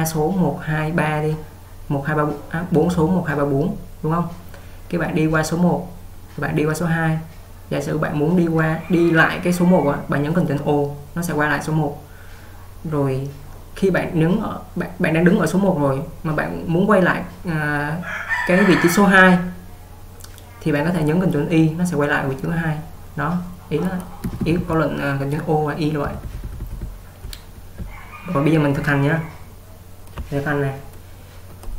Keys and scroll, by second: 24.3-24.6 typing, 26.1-28.7 typing, 30.5-31.5 typing.